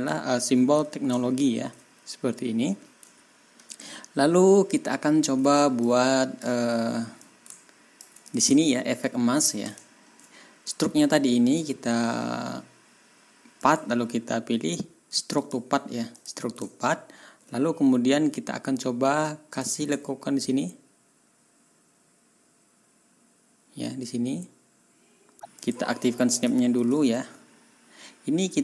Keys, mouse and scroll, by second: 0.3 ctrl+scroll up 2, 1.2 ctrl+scroll up 2, 3.1-3.8 ctrl+scroll down 4, 4.5 ctrl+scroll down 2, 5.8 ctrl+middle click, 5.8-6.5 scroll up 2, 7.2 ctrl+click, 8.2 ctrl+click, 8.6 ctrl+scroll down 1, 9.9 ctrl+scroll down 1, 11.4 click, 13.6 click, 15.4 click, 16.1 click, 16.9 ctrl+scroll up 2, 19.5 click, 20.0 ctrl+scroll up 2, 25.6 click, 26.8 ctrl+s.